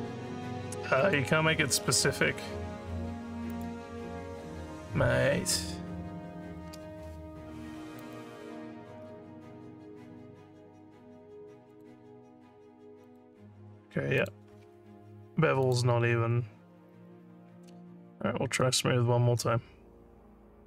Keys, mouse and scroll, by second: 1.0 click, 1.5 scroll up 1, 1.5 scroll down 1, 1.8 scroll up 1, 3.5 click, 8.0 click, 11.7 click, 13.1 click, 14.2 click, 15.7 click, 18.6 click.